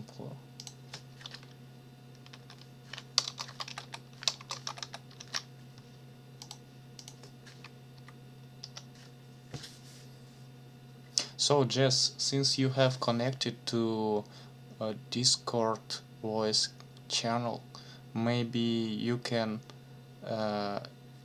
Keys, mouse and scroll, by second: 0.6 click, 2.2-4.7 typing, 5.2 ctrl+s, 6.4 click, 7.9 Up, 7.9-8.5 scroll up 1, 8.6 Return.